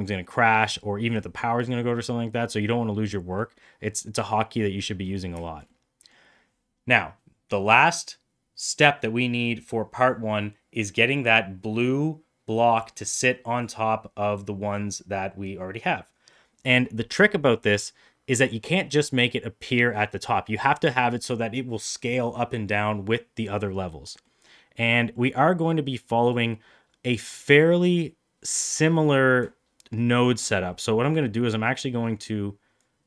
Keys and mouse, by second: 2.9-3.3 middle drag, 4.5 middle click, 5.4 shift+middle click, 5.6-6.0 middle drag, 17.4-18.3 middle drag, 23.9 middle click, 24.3 middle click, 25.2 middle click, 32.9 click.